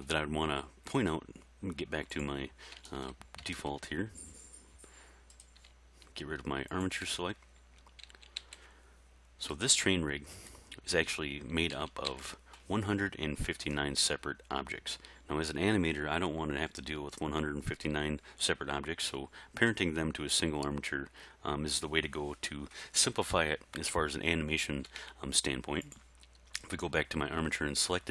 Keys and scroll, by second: 8.1 a, 11.8 a.